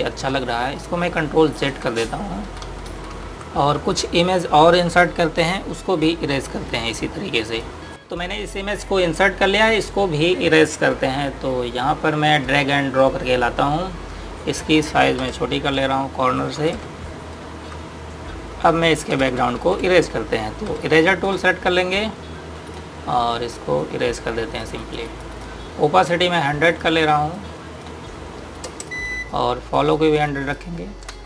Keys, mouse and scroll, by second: 0.8 typing, 2.1 click, 2.6-3.3 typing, 6.8 click, 11.3 click, 16.0 typing, 17.4 typing, 18.3 click, 19.6-21.5 typing, 23.3 click.